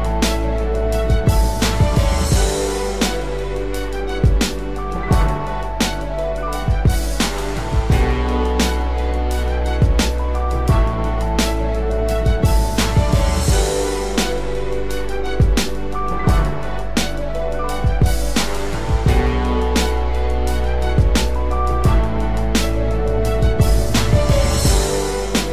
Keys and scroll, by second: 19.7 ctrl+z.